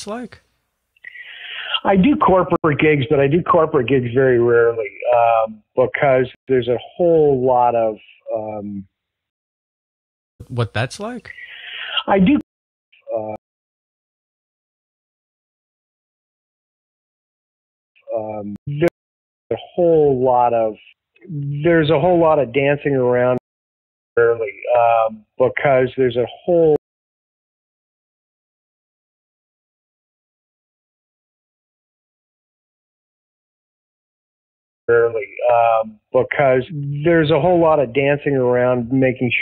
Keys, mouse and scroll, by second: 0.1 click, 0.9-2.3 drag, 2.5 Delete, 3.9 click, 5.2 click, 6.3 Delete, 6.7 click, 8.4 click, 9.2 space, 10.2 click, 10.2 space, 10.8 click, 11.3 click, 12.3 space, 12.8 click, 12.8 space, 13.3 click, 15.0 click, 15.2 click, 17.0 click, 17.9 space, 18.5 ctrl+shift+Delete, 18.8 space, 19.3 click, 19.4 space, 23.3 space, 23.9 click, 24.1 space, 26.7 space, 27.3-29.5 drag, 30.1-31.1 drag, 31.4 click, 32.3-34.2 drag, 34.7 click, 34.7 space, 37.7 ctrl+s, 38.8-39.4 drag.